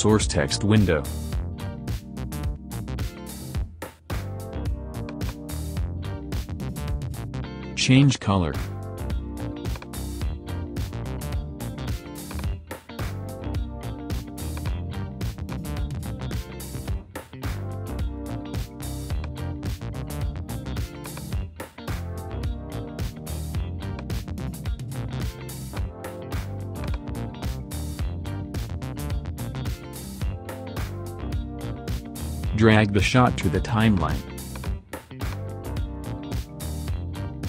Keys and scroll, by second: 0.9 shift+BackSpace.